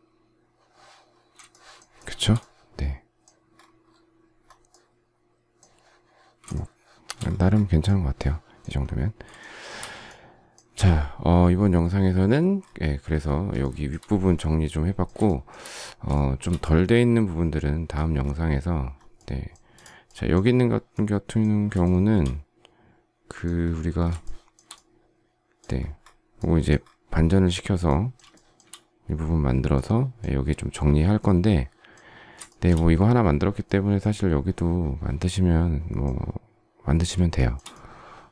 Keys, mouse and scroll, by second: 1.4 shift+middle click, 1.9 shift+middle click, 6.4 shift+middle click, 7.5-7.8 shift+scroll, 8.1 shift+scroll, 9.3 shift+middle click, 13.5 shift+middle click, 15.2 shift+middle click, 21.8 shift+middle click, 24.2 shift+middle click, 28.2 shift+middle click, 32.4 shift+middle click, 37.3 shift+middle click.